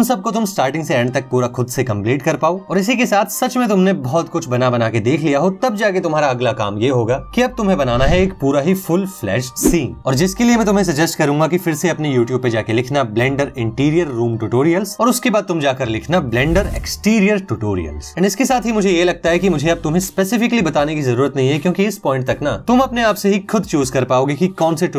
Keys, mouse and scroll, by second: 9.5 click, 10.5 middle click.